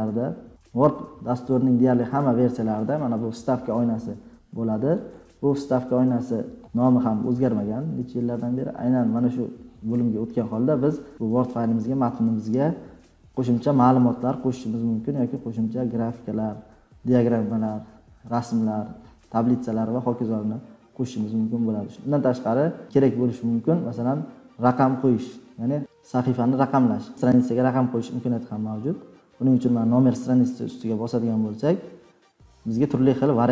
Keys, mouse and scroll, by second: 9.7 scroll, 11.1 scroll, 13.1 click.